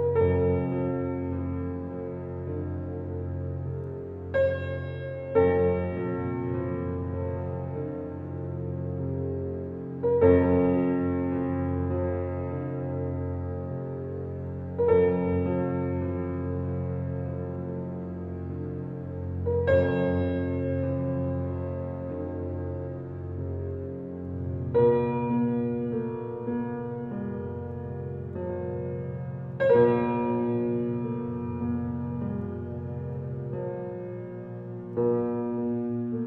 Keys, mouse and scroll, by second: 2.0-3.6 middle drag, 4.4-4.7 scroll down 3, 4.7-5.2 middle drag, 5.2 shift+a, 6.6 g, 7.9 alt+middle click, 8.8 g, 10.1 g, 12.1 s, 13.5-14.3 middle drag, 14.3 s, 15.6 scroll down 3, 15.7-16.1 scroll up 1, 16.1 s, 17.0 g, 18.8 alt+middle drag, 19.1-19.6 scroll up 3, 19.6 g, 21.6-23.1 middle drag, 23.3-24.6 middle drag, 24.6 g, 26.0 g, 27.7-29.3 middle drag, 30.2 shift+d, 33.0 shift+click, 33.5-34.6 middle drag, 34.6 shift+d.